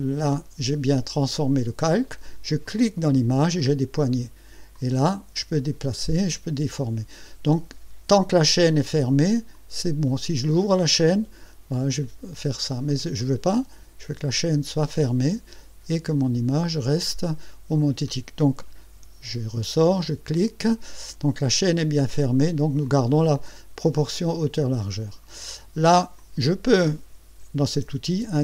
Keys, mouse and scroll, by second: 2.6 click, 4.7-7.3 drag, 9.5 click, 10.9-13.0 drag, 14.4 click, 16.2 click, 18.9 Escape, 20.0 click, 22.8-25.4 drag, 26.2 click, 27.6 KP_6, 28.2 KP_0.